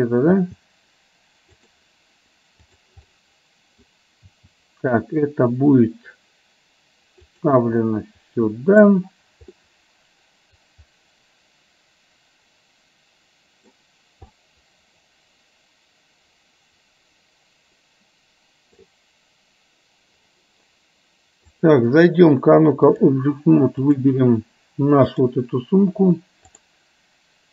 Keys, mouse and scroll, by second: 0.6 g, 3.2 middle click, 4.4 g, 7.9-8.9 middle drag, 9.7-10.7 scroll up 1, 10.7-13.7 middle drag, 14.4-18.9 middle drag, 21.6-23.1 drag, 25.2 click, 26.7-27.5 drag.